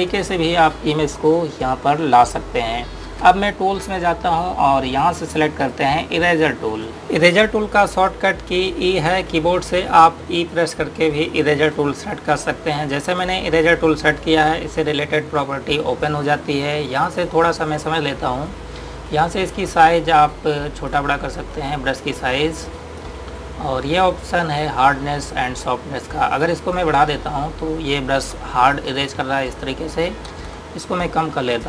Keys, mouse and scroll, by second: 6.2 click, 6.9 right click, 13.7 click.